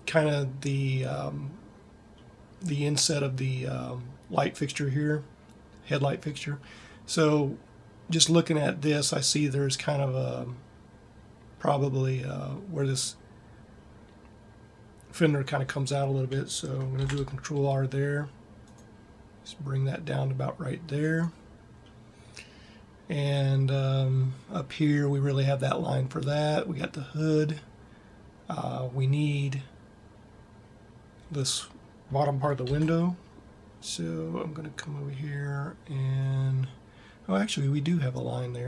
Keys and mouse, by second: 16.8 ctrl+r, 33.0 ctrl+r.